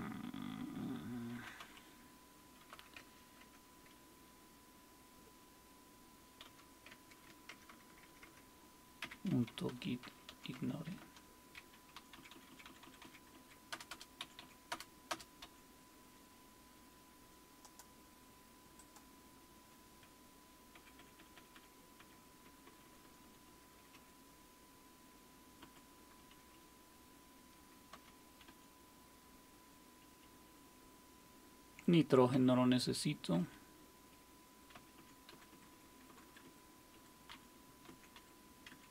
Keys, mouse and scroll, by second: 1.1-4.0 typing, 6.4 typing, 6.9 Tab, 7.5-10.8 typing, 11.0 Return, 12.2 Down, 12.3 Down, 12.5 Down, 12.7 Down, 12.8 Down, 13.3 Down, 13.7 Return, 13.9 Return, 14.2 Up, 14.5-15.2 typing, 15.4 Up, 18.8-20.7 drag, 20.7 Up, 21.3 Up, 22.0 Up, 22.4 Right, 22.7-23.5 Right, 23.9 Delete, 25.6 Down, 26.3 Delete, 26.5 Delete, 27.9 g, 28.5 Down, 30.0 Delete, 30.0 typing, 30.2 Delete, 32.3 n, 33.4 Down, 34.7 Up, 35.0 Up, 35.3 Right, 35.5 Right, 35.7 Right, 36.1 Right, 36.3 Right, 36.9 Delete, 37.3 Down, 37.9 Right, 38.2 Delete, 38.7 Down.